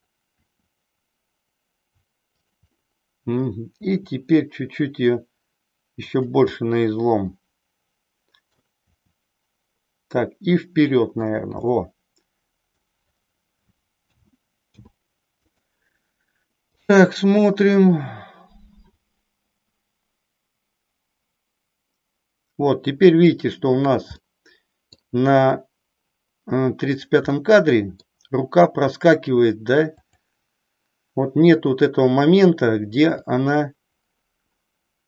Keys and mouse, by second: 0.2 r, 2.9 middle click, 3.7 r, 6.6-8.6 middle drag, 8.9 r, 11.6-12.9 middle drag, 14.1 a, 14.6 i, 16.9-23.3 drag, 24.2 middle click, 27.3 middle click, 30.0-31.1 drag, 33.3 click.